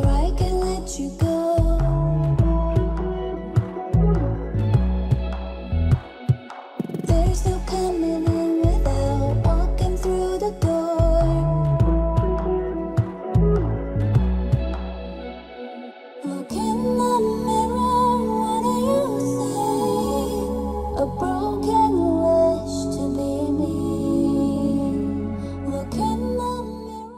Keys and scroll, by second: 1.1 ctrl+space, 18.9 ctrl+z.